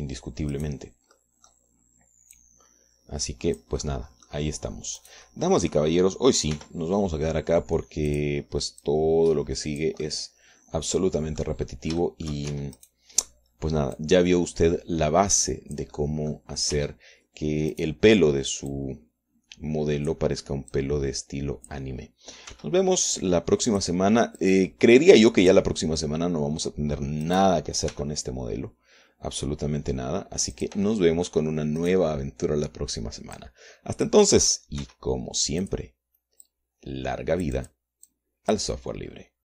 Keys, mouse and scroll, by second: 1.0 click, 1.3 Tab, 2.1 click, 2.8 click, 4.0-5.4 drag, 5.5 click, 6.6 click, 8.2 r, 9.7 click, 10.5-11.7 drag, 11.8-13.2 drag, 13.2 middle click, 13.7 shift+middle click, 14.1 shift+Tab, 14.4 shift+right click, 15.6-17.6 drag, 17.6 middle click, 18.3 Tab, 19.4 click, 20.3-21.9 drag, 22.3-23.5 drag, 24.1 r, 25.3 click, 26.0-27.3 drag, 27.3-28.9 middle drag, 28.9 click, 29.2 middle click, 29.5 g, 32.2 click, 32.5 middle click, 33.5 click, 35.0 click, 36.5 r, 37.3 click, 38.1-39.5 drag.